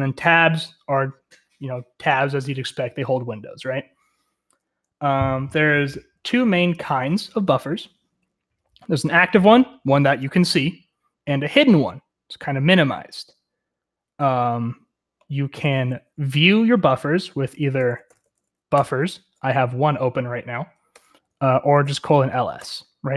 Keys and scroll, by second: 6.1-8.4 typing, 17.6-18.7 typing, 18.8 Return, 20.9 Return, 21.0-22.6 typing.